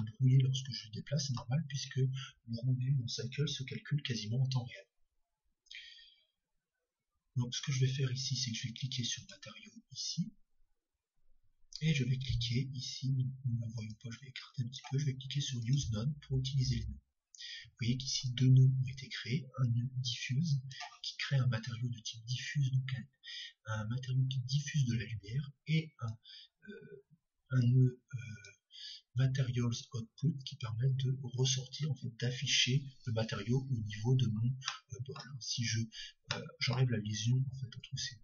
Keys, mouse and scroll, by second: 0.6-2.2 middle drag, 9.2-11.1 drag, 13.8-20.7 drag, 17.1-20.7 middle drag, 26.1-28.7 drag, 34.7-38.2 middle drag, 37.8-38.2 drag.